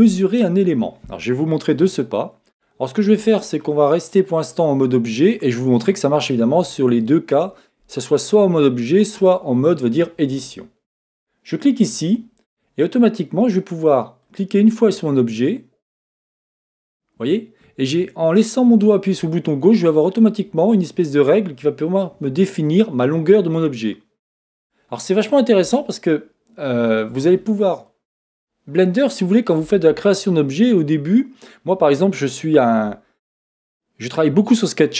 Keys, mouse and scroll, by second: 4.7-8.7 scroll up 1, 11.1 click, 14.2 click, 15.9 click, 24.9-25.8 scroll up 2, 25.8-30.0 shift+middle drag, 28.2-30.0 scroll down 1, 30.0-32.5 scroll down 1.